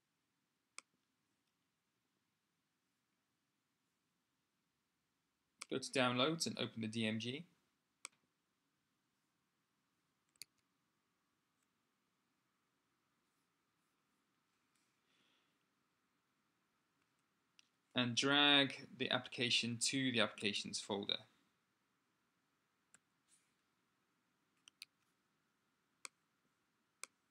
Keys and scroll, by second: 10.2 super+Tab, 22.9 super+n, 24.6 shift+a.